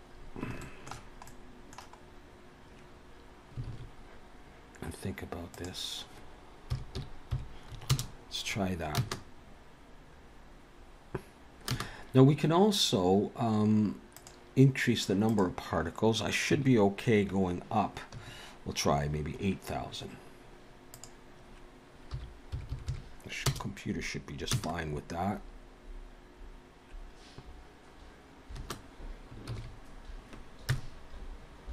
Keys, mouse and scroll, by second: 0.1 scroll down 2, 0.6 shift+middle click, 1.3 middle click, 2.0 scroll up 2, 3.6 alt+a, 5.6 click, 9.0 space, 11.7 space, 14.2 click, 15.3 click, 21.0 click, 22.7 0, 22.8 0, 24.5 space, 28.6 space, 29.5 ctrl+s, 30.7 KP_0.